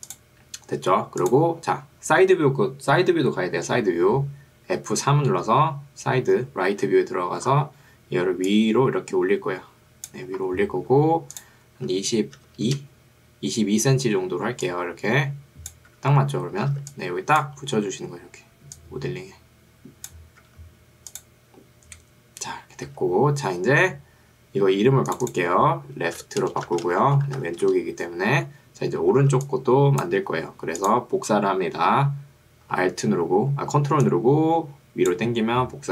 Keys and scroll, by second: 5.0 F3, 12.0 2, 12.8 Return, 14.4 ctrl+2, 16.0 Escape, 16.8 ctrl+2, 20.4 Escape, 23.0 F1, 26.2-27.4 typing, 27.8 Return, 29.4 ctrl+2, 30.2 Escape.